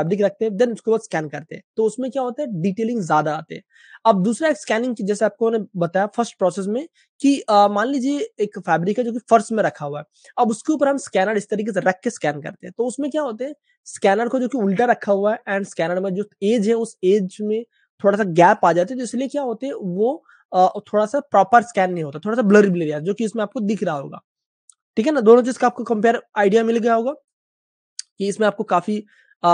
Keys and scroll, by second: 23.9 Page_Up, 28.7 space.